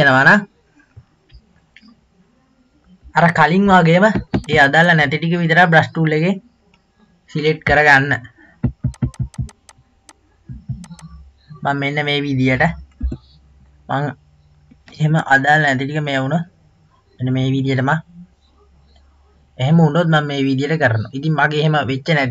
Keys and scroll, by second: 13.3 b.